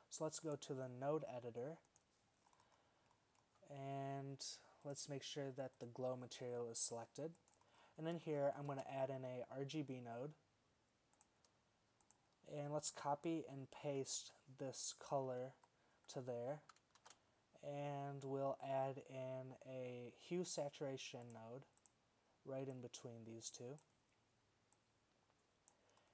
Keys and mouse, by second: 8.8 shift+a, 14.3 super+c, 15.4 v, 17.2 shift+a, 23.0-24.0 drag, 25.0-25.8 drag.